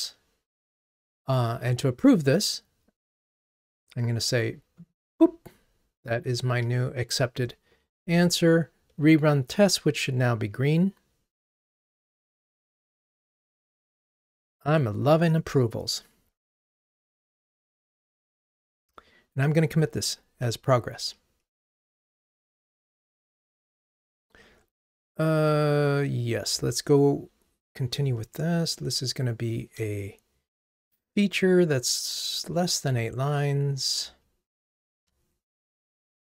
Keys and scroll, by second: 8.1 ctrl+r, 20.0 super+k.